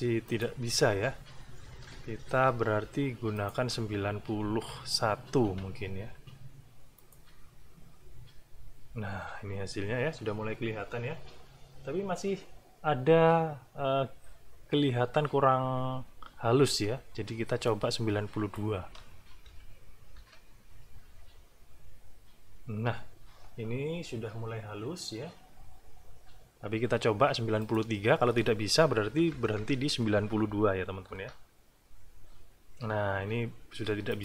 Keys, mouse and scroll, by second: 0.2 click, 2.3 alt+`, 3.4 click, 4.3 BackSpace, 5.4 KP_1, 7.0 click, 17.7 click, 19.5 2, 20.2 Return, 27.6 click, 29.0 BackSpace, 30.5 KP_3, 34.1 click.